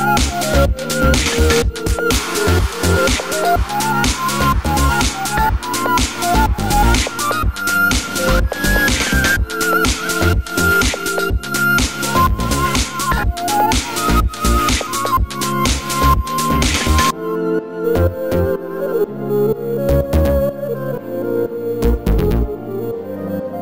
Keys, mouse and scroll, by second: 0.7 click, 0.9 Tab, 3.4-8.3 middle drag, 4.7 ctrl+r, 8.3 click, 9.2 alt+click, 9.8 alt+click, 10.3 alt+click, 10.6 alt+shift+click, 11.0 alt+shift+click, 11.3 alt+shift+click, 11.5-15.2 middle drag, 11.9 s, 15.2-17.9 drag, 16.0 s, 18.0 middle click, 18.7 alt+click, 19.4 alt+shift+click, 19.7 alt+shift+click, 20.2-22.1 middle drag, 20.2 s, 22.1 click, 22.3-23.6 middle drag.